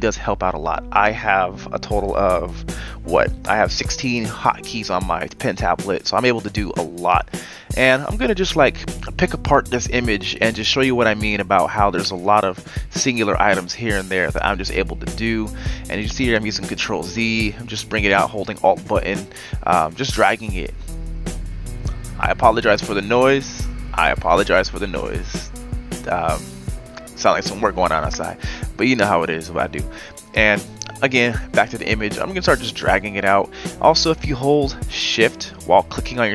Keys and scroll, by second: 0.9 v, 2.3 Delete, 3.5 z, 5.3-9.1 typing, 13.9 ctrl+z, 14.4 ctrl+z, 15.4-16.2 typing, 19.7 ctrl+z, 24.1 ctrl+z.